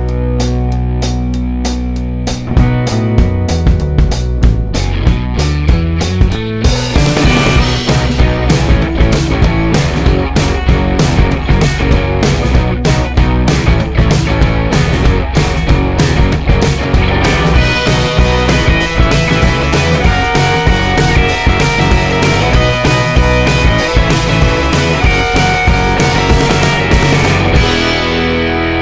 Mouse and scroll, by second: 0.2-3.1 right drag, 3.9 right click, 4.6 click, 5.9-7.9 drag, 9.2 click, 10.7 click, 12.4 click, 13.8 click, 14.4 click, 15.4-17.0 right drag, 17.7 click, 19.4 click, 20.0 click, 20.6-23.5 right drag, 25.0 click, 25.6 right click, 27.5 right click, 28.6-28.8 drag.